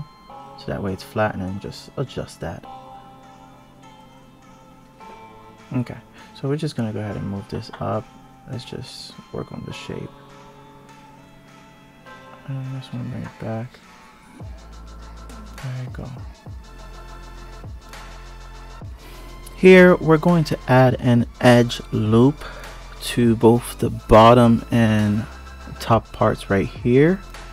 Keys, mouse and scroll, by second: 2.2 click, 3.0-3.4 scroll down 4, 3.4-3.7 scroll up 1, 4.2 click, 5.6 click, 6.3 click, 7.8 click, 8.5 click, 9.9 click, 10.6 click, 12.4 shift+click, 13.0 click, 14.5 click, 16.3 click, 17.0 click, 18.0 click, 18.5 ctrl+r, 21.7-22.6 scroll down 2, 22.6 click, 25.3 click, 26.7 click.